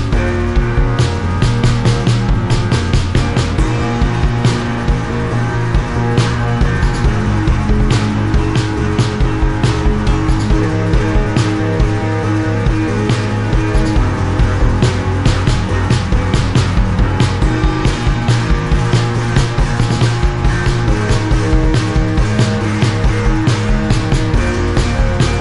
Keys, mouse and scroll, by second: 0.2 click, 1.6 click, 3.0 click, 4.2 click, 4.9 click, 7.8 shift+click, 8.7 click, 9.6 click, 10.0 click, 11.3 click, 15.3 shift+click, 16.1 click, 17.5 click, 18.6 click, 19.2 Delete, 20.6 Delete, 20.6 click, 21.4 Delete, 22.6 Delete, 24.6 Delete, 24.6 click.